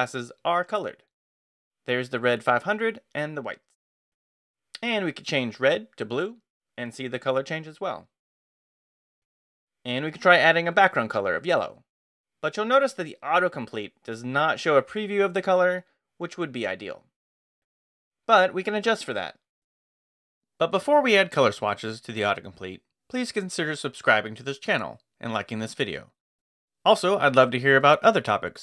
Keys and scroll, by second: 5.0-7.1 typing, 8.9 w, 10.3-13.3 typing, 13.5 ctrl+o, 13.6 ctrl+n, 17.9 Return, 18.4 space, 18.9 Escape.